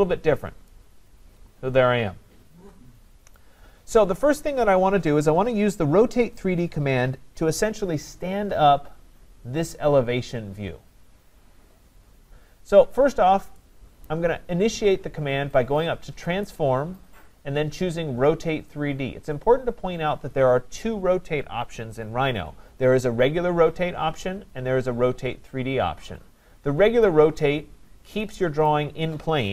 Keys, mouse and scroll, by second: 0.2-1.1 scroll up 3, 1.1 scroll down 3, 1.8 scroll, 3.4 right click, 14.1 right click, 16.4 click, 27.1 click, 27.5 scroll, 28.7 click.